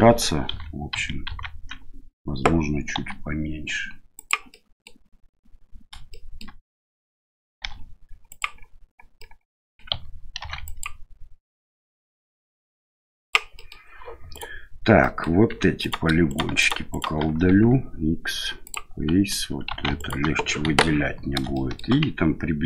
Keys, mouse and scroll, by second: 0.5 ctrl+z, 0.9 ctrl+z, 1.2 ctrl+z, 2.9 s, 4.5 middle click, 6.1 shift+middle click, 7.6 e, 9.2 middle click, 10.4 ctrl+r, 13.6 middle click, 14.3 right click, 15.0 middle click, 15.5 3, 15.8 right click, 16.2 shift+right click, 16.5 shift+right click, 16.9 shift+right click, 17.5 x, 19.7 2, 20.0 alt+right click, 20.6 KP_1, 21.5 shift+middle click.